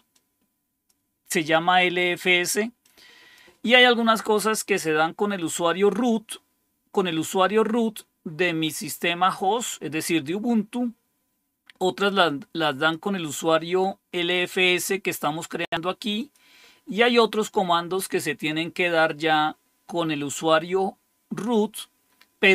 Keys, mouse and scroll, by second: 0.1-1.9 drag, 2.8 click, 12.7 click, 14.3-15.6 drag, 16.1 click.